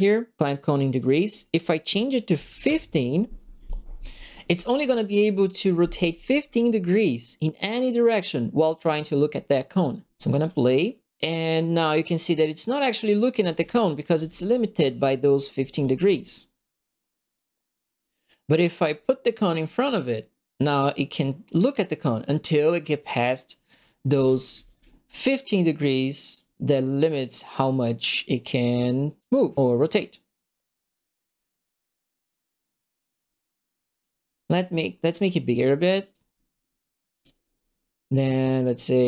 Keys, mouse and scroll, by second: 0.9 click, 2.3 KP_1, 2.3 KP_5, 2.6 KP_Enter, 10.3 click, 13.1-14.2 right drag, 13.2-16.0 typing, 14.2 click, 14.2 right click, 14.4 click, 14.5 right click, 15.4 right click, 17.4-23.6 right drag, 23.8-25.0 typing, 23.9 right click, 24.7 click, 26.3-28.0 drag, 28.6 click, 30.4-33.9 drag, 36.0 click, 37.1 click.